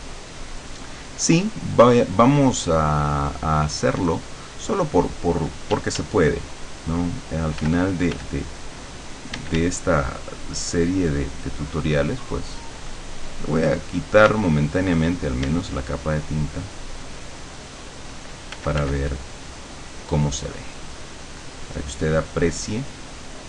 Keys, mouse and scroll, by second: 5.8 d, 6.3-8.9 drag, 7.6 f, 9.0-10.2 drag, 9.4 d, 10.4-14.5 drag, 14.3 d, 14.6-15.6 drag, 15.5 d, 15.7-17.2 drag, 18.5 click, 18.6 f, 19.2-23.4 drag.